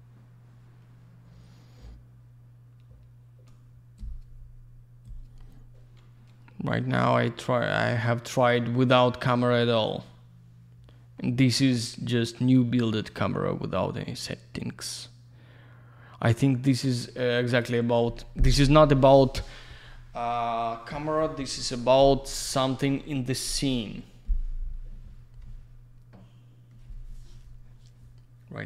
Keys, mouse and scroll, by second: 17.5 click.